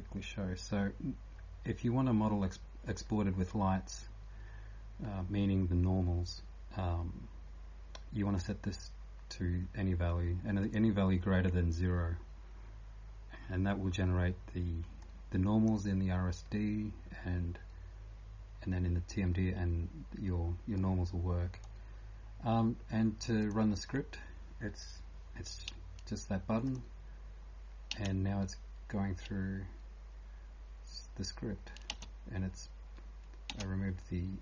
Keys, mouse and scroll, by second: 10.6 click, 20.8 right click, 23.4 click, 27.9 space, 32.0 space.